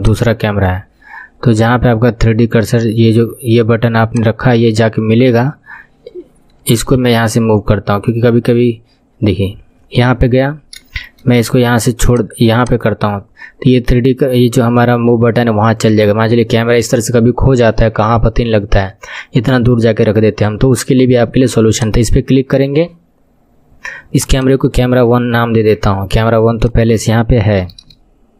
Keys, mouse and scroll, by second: 0.0 click, 1.4-2.2 scroll down 7, 2.5 scroll down 3, 4.1-7.1 drag, 4.1 scroll down 2, 6.9 n, 7.9-9.1 scroll down 8, 9.1-10.9 scroll down 4, 10.9-12.1 shift+middle drag, 12.1 click, 12.6 click, 21.8 click, 24.1 click, 24.3-28.3 drag, 27.8 BackSpace.